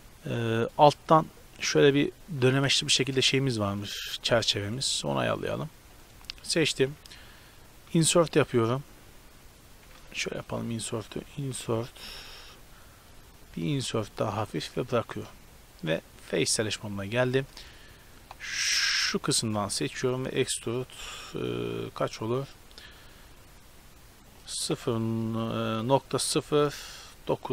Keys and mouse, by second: 1.2-3.0 middle drag, 3.0 shift+space, 3.9 right click, 4.0 Tab, 6.1-7.4 right drag, 10.5 ctrl+z, 11.6 i, 13.8 i, 15.8-16.9 drag, 17.4 a, 20.0 e.